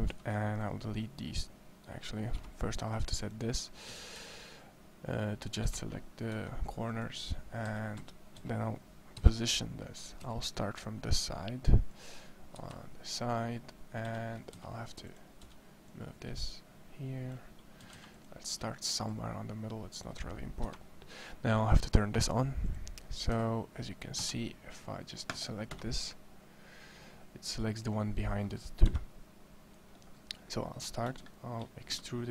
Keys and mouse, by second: 3.7 a, 4.0 a, 4.4 c, 6.1 x, 7.5 a, 7.8 a, 8.2 a, 8.9 KP_1, 10.1 g, 12.3 KP_3, 13.9 a, 14.3 a, 14.6 c, 17.7 a, 17.9 c, 20.5 KP_1, 22.2-23.2 drag, 23.2 a, 23.9 a, 24.9 c, 28.7 KP_1, 31.7 e.